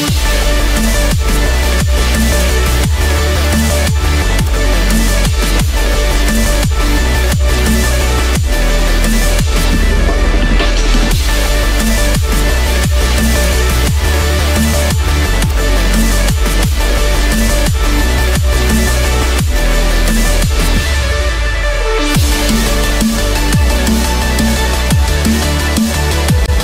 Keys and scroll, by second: 2.0 ctrl+z, 8.7 ctrl+=.